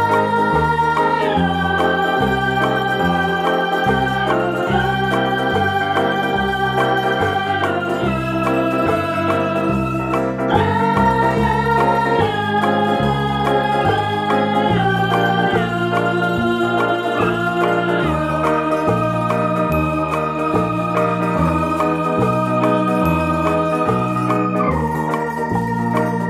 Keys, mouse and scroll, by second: 1.3 click, 2.8-6.8 middle drag, 3.8 ctrl+b, 6.8 click, 7.1-7.5 scroll down 2, 7.5-10.4 middle drag, 7.7 Tab, 9.7-10.4 scroll down 2, 10.4 right click, 10.6-13.1 middle drag, 10.8 Tab, 13.1 click, 13.3 middle click, 13.9 right click, 14.2-15.7 middle drag, 15.7 shift+right click, 16.0-17.5 middle drag, 17.0 e, 17.5 right click, 18.0-20.8 middle drag, 20.8-21.9 drag, 21.9-23.0 middle drag, 23.0 right click, 23.0 s, 25.2 KP_Enter, 25.7 middle click.